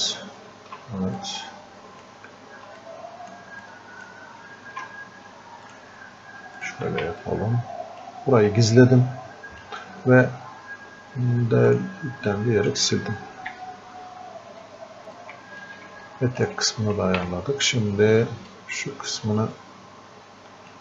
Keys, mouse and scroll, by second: 1.2-2.8 drag, 2.8 shift+click, 3.7-8.7 ctrl+shift+drag, 8.7-11.7 drag, 12.6 click, 13.5 f, 14.7 click, 15.0 f, 15.2 click, 15.5 shift+click, 16.1-20.8 alt+drag.